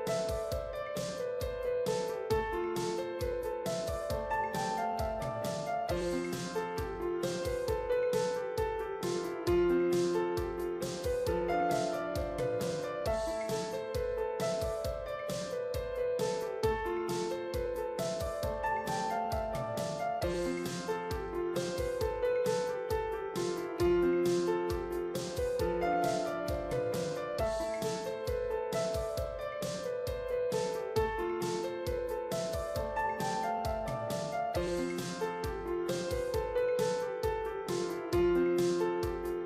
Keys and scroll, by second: 1.2 ctrl+t, 16.9 ctrl+t, 28.7 ctrl+t.